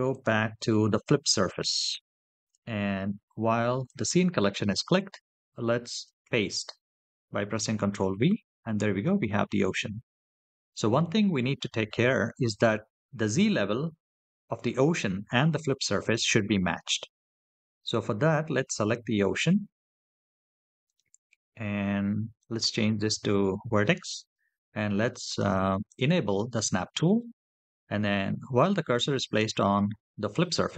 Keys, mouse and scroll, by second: 3.7 click, 6.1 ctrl+v, 10.8 click, 18.6 click, 20.6-25.1 drag, 25.7 click.